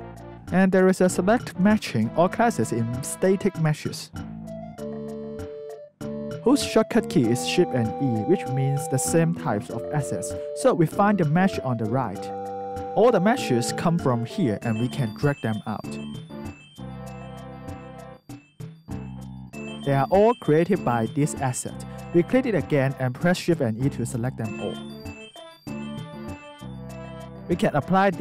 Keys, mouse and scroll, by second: 7.8 alt+click, 8.7 click, 8.9 click, 10.1 click, 11.7 click, 12.8 scroll, 15.7 click, 16.4 click, 17.1 click, 17.6 click, 18.8 click, 19.3 click, 20.0 click, 20.9 click, 21.6 alt+right click, 23.6 shift+e, 24.3 alt+click, 25.9 alt+click, 26.5 alt+middle click, 27.3 alt+click.